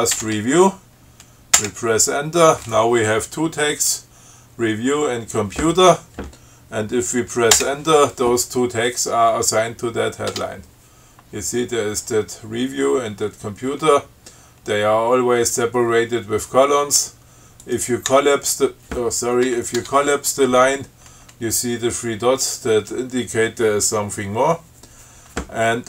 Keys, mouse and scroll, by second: 0.0-0.8 typing, 1.7 Return, 7.7 Return, 10.5 Tab, 17.8 click, 18.2 q, 19.6 BackSpace, 19.9 Tab.